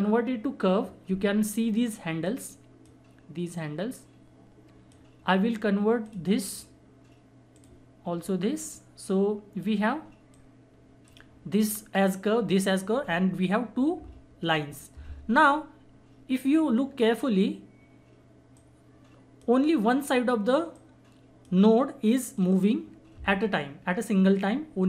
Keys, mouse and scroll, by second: 2.3-13.6 drag, 17.0 scroll up 1, 18.5-24.8 drag.